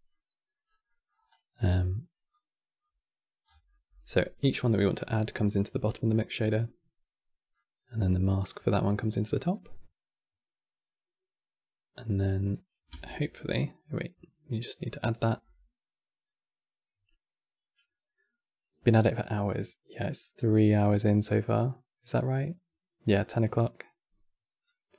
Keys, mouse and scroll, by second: 0.4-1.5 scroll up 14, 0.6 middle click, 2.0 click, 3.2 scroll down 6, 3.4-4.9 middle drag, 4.9 scroll up 1, 5.0-5.5 scroll down 1, 5.6-7.2 middle drag, 7.2 click, 12.8-13.6 middle drag, 13.6 click, 24.3 click.